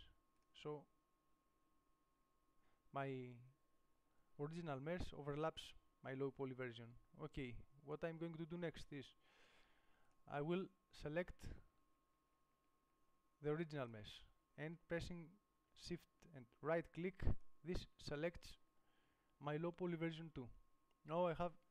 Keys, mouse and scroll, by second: 6.5 middle click, 11.7 g, 14.1-16.1 drag, 17.6-18.6 drag.